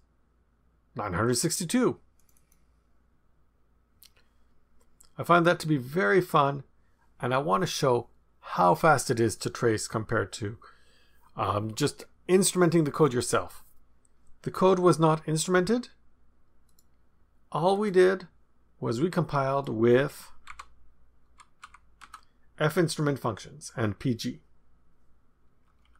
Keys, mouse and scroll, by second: 2.1 click, 16.6 click, 17.7 click, 19.0-19.5 scroll up 1, 19.5 click, 19.8-20.5 scroll down 1, 20.4 Up, 21.2 Up, 21.8 Up, 22.0 Down, 25.7 Down.